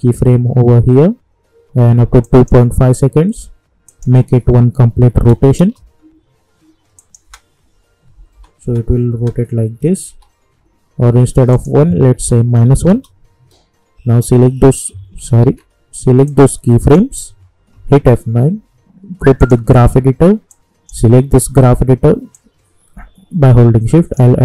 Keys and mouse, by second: 2.2 click, 5.6 Return, 6.9 click, 7.2 space, 10.1 k, 11.5 click, 12.1 -, 12.8 Return, 14.2 click, 15.4 ctrl+z, 16.2-17.7 drag, 17.7 F9, 19.4-24.4 drag, 23.5-24.4 shift+drag.